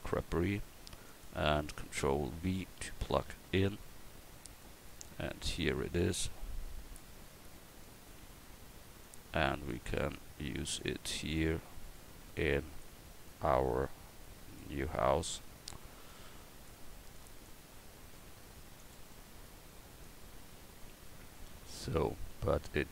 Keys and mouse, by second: 2.5 ctrl+v, 5.6-10.8 drag, 11.9-18.8 drag, 20.0-21.8 drag, 22.2 click.